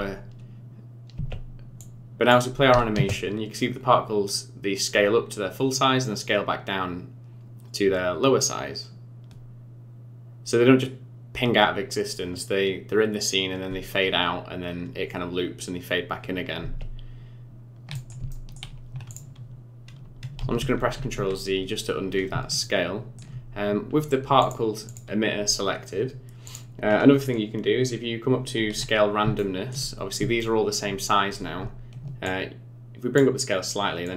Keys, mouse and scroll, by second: 1.1 space, 1.8 click, 2.9 space, 16.6 space, 17.0-17.9 scroll down 5, 17.9 middle click, 18.3 shift+middle click, 19.1 click, 20.4 ctrl+z, 20.6 ctrl+z, 20.8 ctrl+z, 22.1 scroll up 5, 22.6 shift+middle click, 23.8-24.4 scroll down 3, 24.4 click, 24.8 click, 26.4 click, 26.8-28.6 scroll up 14, 28.8-29.2 scroll up 5, 29.4 shift+middle click, 30.0 scroll up 1, 30.4 shift+middle click, 32.2 shift+click, 34.0 shift+click.